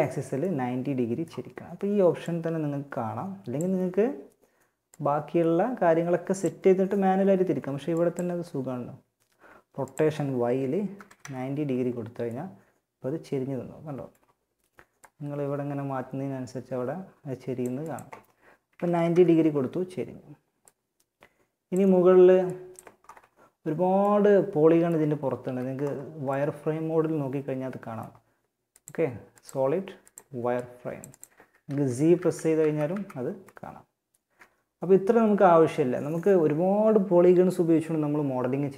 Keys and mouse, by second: 1.4-3.2 drag, 4.1-6.6 drag, 7.2-10.8 drag, 14.4-16.0 drag, 17.0-18.8 drag, 19.9-21.6 drag, 22.2-23.2 drag, 23.2 middle click, 24.6 z, 27.9-31.1 drag, 30.8 z, 31.4 z, 31.8 z, 32.1 z, 32.6 middle click.